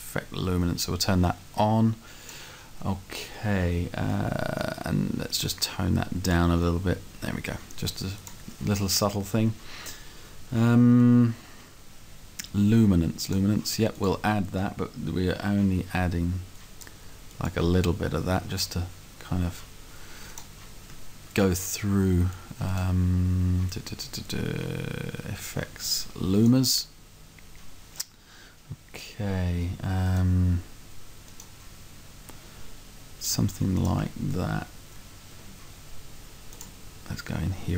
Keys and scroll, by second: 3.6 Left, 21.0 Right, 34.0 Left, 35.0 Right.